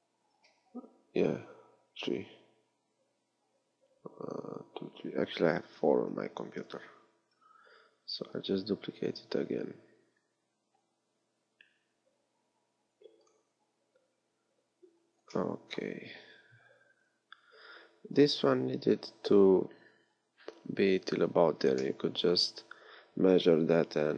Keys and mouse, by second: 6.5 shift+d, 13.3-24.1 middle drag.